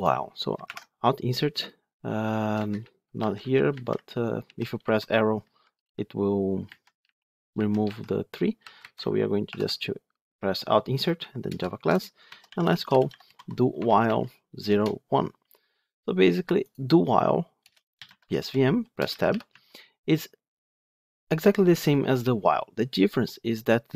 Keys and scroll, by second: 0.6 alt+Insert, 3.0 Down, 3.5 Left, 4.3 Right, 4.6 Left, 5.6 Down, 6.5 Left, 6.9 Right, 7.4 Left, 7.7 Right, 8.5 Down, 8.6 Up, 9.3 alt+Insert, 19.4 Tab, 23.5 Tab.